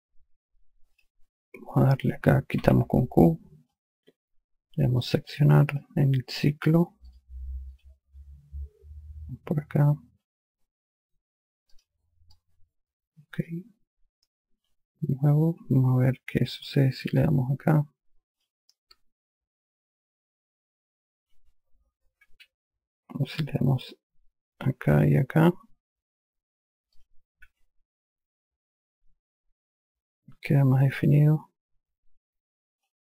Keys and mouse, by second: 1.3 click, 3.0 q, 4.1 alt+click, 6.1 click, 7.5 click, 12.1 click, 12.7 alt+click, 14.6 q, 16.0 q, 18.7 click, 19.2 q, 21.7 q, 22.6 ctrl+z, 25.0 click, 27.3 click, 27.9 q, 29.3 alt+click.